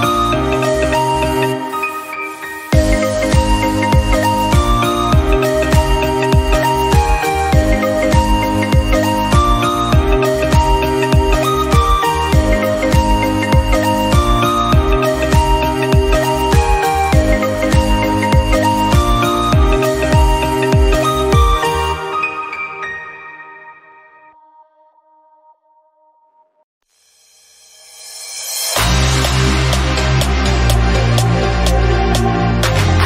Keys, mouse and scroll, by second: 0.3 click, 0.7 scroll down 2, 0.9 middle click, 1.3-1.8 scroll up 1, 1.8 i, 2.6 scroll down 2, 2.7 middle click, 3.1-3.5 scroll up 1, 3.5 click, 4.6 i, 5.5-6.0 scroll down 4, 5.6 middle click, 6.0 middle click, 6.3-6.7 scroll up 1, 6.7 shift+middle click, 7.0-7.4 scroll up 1, 7.4 click, 8.0 i, 8.9 Tab, 9.1 scroll down 2, 9.3 click, 9.5 middle click, 10.1-10.7 scroll up 2, 10.3 middle click, 10.7 shift+middle click, 11.0-12.0 drag, 12.0 /, 12.3 middle click, 13.0-14.4 drag, 14.5 click, 15.2-16.2 right drag, 16.2 /, 16.7 click, 16.9 middle click, 17.3-17.7 scroll up 1, 17.7-18.0 scroll down 1, 18.0 shift+middle click, 18.7 Tab, 19.2-20.0 scroll up 1, 20.0-21.5 shift+middle drag, 22.6-23.2 scroll up 1, 23.2 ctrl+r, 25.3-26.9 shift+middle drag, 26.9 ctrl+r, 28.1 click, 28.7 click, 29.3 /, 29.5 middle click, 29.7-30.9 scroll up 3, 30.9-32.3 middle drag, 32.3-32.7 scroll up 5, 32.7 middle click.